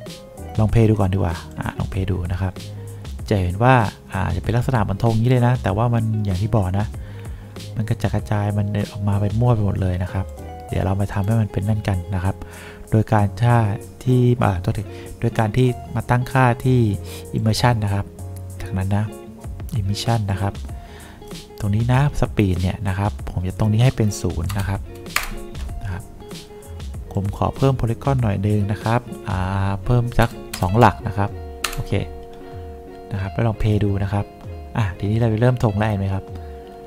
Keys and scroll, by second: 24.6 0, 25.3 Return, 30.3 0, 31.8 Return.